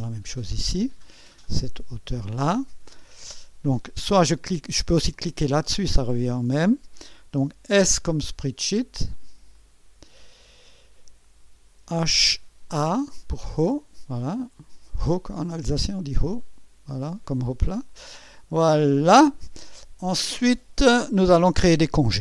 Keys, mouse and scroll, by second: 1.7 click, 5.1 click, 7.7 s, 9.5 click, 10.5 click, 10.5 typing, 11.6-12.7 typing, 13.6-15.2 drag, 16.4 click, 18.5-20.0 drag.